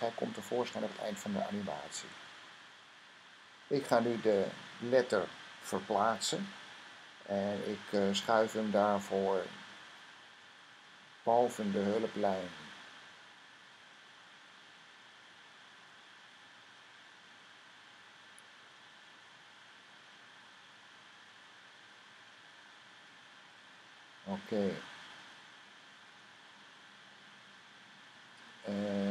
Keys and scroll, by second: 11.2 Up, 11.8 Up, 12.2 Up, 12.7 Up, 13.1 Up, 13.5 Up, 13.9 Up, 14.3 Up, 14.6 Up, 15.0-16.4 typing, 17.1 Up, 17.7 Up, 18.4 Up, 19.7 Up.